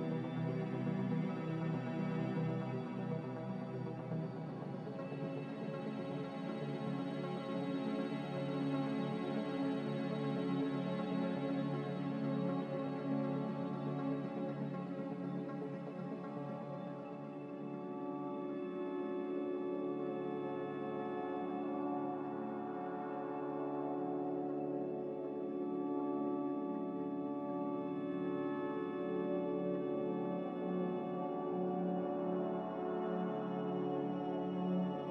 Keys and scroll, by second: 1.5-2.3 typing, 5.2 ctrl+c, 7.2 ctrl+v, 7.7 ctrl+c, 10.7 z, 13.3 g, 14.3-15.3 typing, 17.8-21.6 typing, 24.5 ctrl+c, 28.3 ctrl+v.